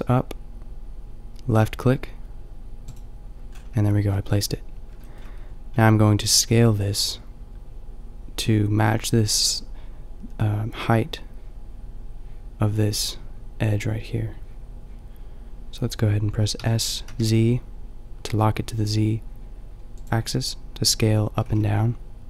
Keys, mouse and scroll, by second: 3.0-7.1 drag, 16.6 s, 20.0-22.2 drag, 21.4 s.